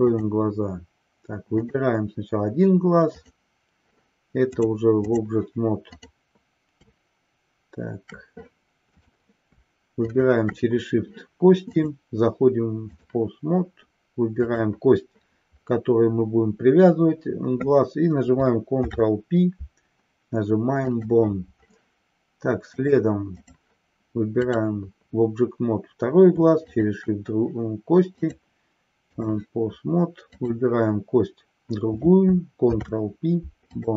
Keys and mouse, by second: 1.7 click, 4.6 click, 5.9 click, 9.9 shift+click, 11.7-13.2 drag, 18.7 ctrl+p, 22.8-23.7 drag, 24.4 click, 26.6 shift+click, 28.3-29.4 drag, 32.7 ctrl+p.